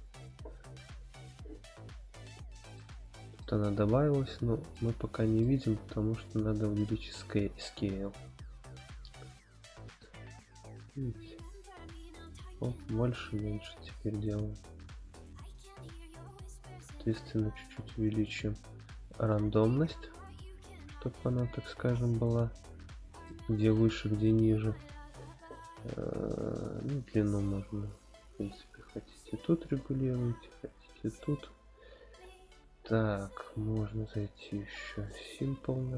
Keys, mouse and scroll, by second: 2.8-3.4 shift+middle drag, 3.6 scroll up 1, 4.7-5.4 middle drag, 4.7 scroll up 1, 5.9-6.7 scroll down 1, 7.4-15.6 drag, 17.1-19.4 drag, 19.6-23.3 middle drag, 24.2-25.7 scroll up 1, 25.7-26.6 scroll up 1, 26.6-31.5 drag, 26.6 scroll up 4, 32.2-32.9 scroll down 4, 32.7 scroll up 1, 32.9-34.0 scroll down 1, 34.0 click, 34.0 scroll down 1, 35.2 click.